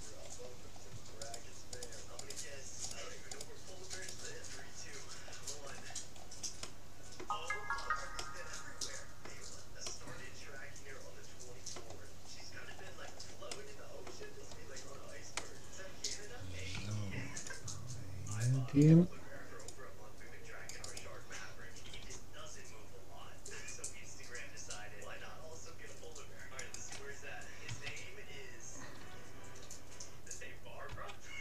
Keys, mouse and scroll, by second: 0.2 scroll up 1, 0.4 scroll down 1, 0.7 scroll up 1, 0.8 scroll down 1, 1.0-2.6 middle drag, 1.2-5.6 right drag, 4.5-9.8 middle drag, 9.8-11.6 drag, 12.2-17.4 middle drag, 16.8 c, 22.0 g, 27.8 a, 29.0 g, 31.0 c.